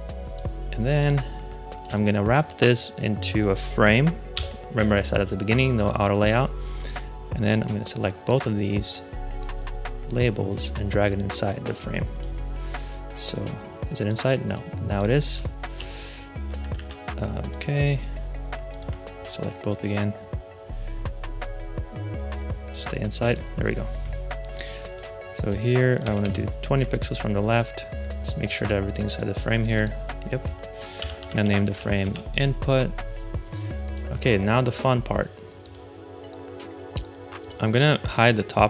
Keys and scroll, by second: 1.7 space, 4.2 alt+super+g, 15.7 alt+w, 16.6 super+z, 25.9 alt+Left, 30.6-32.1 typing.